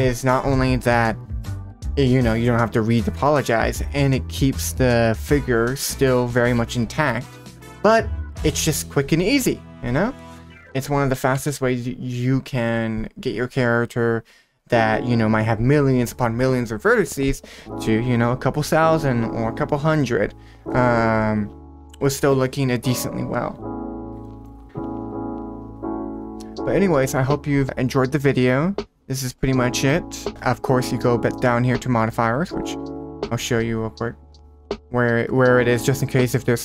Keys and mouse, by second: 5.8 middle click, 6.4 shift+middle click, 11.3 g, 24.2 middle click, 34.5 click.